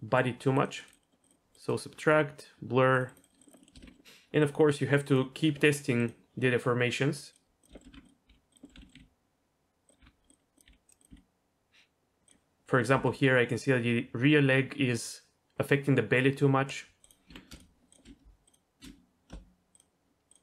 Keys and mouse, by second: 0.1 middle click, 0.6 click, 1.0 middle click, 1.3 click, 1.6 click, 3.0 click, 3.2 click, 3.4 click, 3.5 click, 3.6 middle click, 3.7 shift+middle click, 3.8 Tab, 4.4 click, 5.1 click, 5.9 click, 7.2 click, 7.6 click, 7.7 shift+middle drag, 7.9 Tab, 8.3 g, 8.6 click, 8.7 z, 8.9 click, 8.9 g, 10.0 r, 10.7 g, 11.0 click, 11.1 g, 12.4 g, 12.9 g, 17.1 click, 17.3 Tab, 18.5 shift+click.